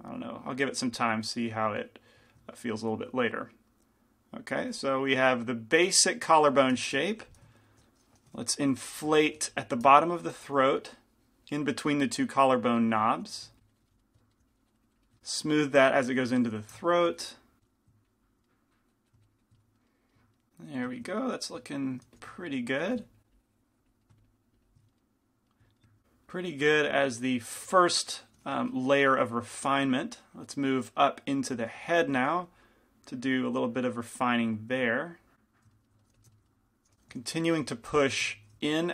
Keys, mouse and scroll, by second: 4.0-7.2 drag, 4.8 f, 8.9 i, 9.6 f, 10.4 f, 10.9-13.2 drag, 13.4 f, 13.6 click, 13.6 middle click, 14.5 click, 14.5 middle click, 15.2 middle click, 15.2 f, 16.3 click, 16.3 middle click, 16.7 f, 17.3 f, 17.6 click, 17.6 middle click, 17.6 right click, 18.1-19.9 drag, 18.1-19.3 middle drag, 19.6 middle click, 20.0 click, 22.2 f, 23.0 f, 23.3-25.5 drag, 24.1-29.7 middle drag, 28.7 g, 28.7 f, 29.7 f, 31.9 f, 32.3 f, 33.5-36.2 drag, 36.2 f, 37.7 f, 37.7 i, 38.3 f.